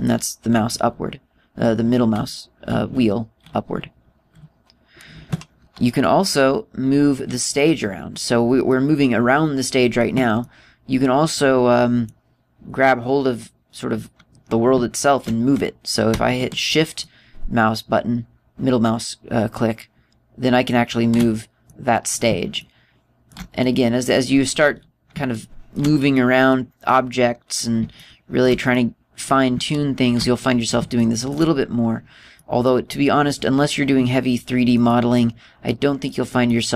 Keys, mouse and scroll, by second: 1.0-1.3 scroll up 4, 1.3-2.1 scroll down 4, 2.1-3.1 scroll down 9, 2.6-3.4 scroll up 4, 3.4-3.9 scroll down 2, 3.9 scroll up 2, 4.2-5.4 scroll down 6, 9.2 middle click, 10.9 middle click, 17.5 shift+middle click, 22.2 middle click, 23.1 shift+middle click, 24.1 middle click, 24.8-25.9 scroll up 7, 25.9 shift+middle click, 25.9 scroll up 1, 26.7 middle click, 27.4 middle click, 27.9-28.5 scroll up 2, 28.5 shift+middle click, 29.3 shift+middle click, 31.0 scroll down 3, 31.5 shift+middle click, 32.9 middle click, 33.4 middle click, 34.2-34.9 scroll down 2, 34.9 middle click, 35.4 middle click, 36.2 middle click.